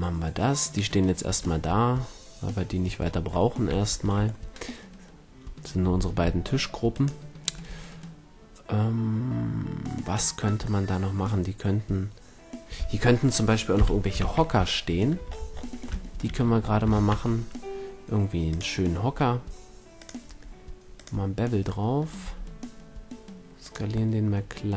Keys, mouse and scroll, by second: 2.3-4.6 middle drag, 6.9-8.7 right drag, 7.5 a, 13.8 KP_1, 14.2 shift+c, 17.0 shift+a, 20.0-21.8 drag, 21.8-24.1 middle drag, 22.2 s, 24.1-24.7 drag.